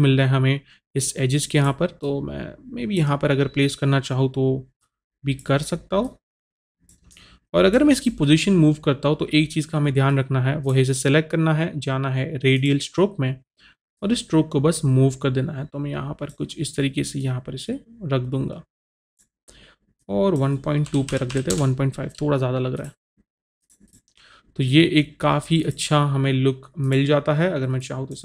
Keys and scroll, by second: 20.9 KP_1, 21.2 KP_Decimal, 21.3 KP_2, 21.5 Return.